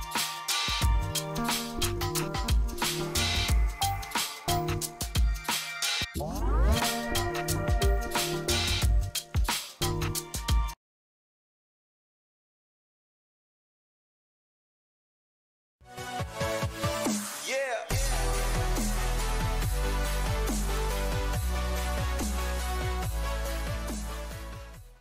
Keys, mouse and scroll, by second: 3.3 F4, 4.7 click.